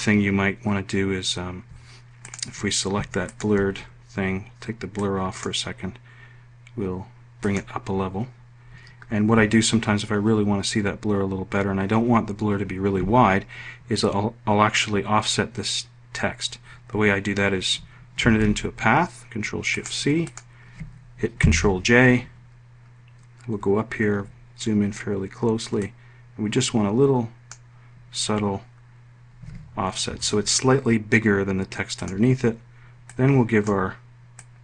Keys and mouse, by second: 2.5 click, 18.3 ctrl+shift+c, 21.5 ctrl+j, 25.9-27.6 drag, 30.1 F1, 32.0 click, 33.1 click, 34.4 click.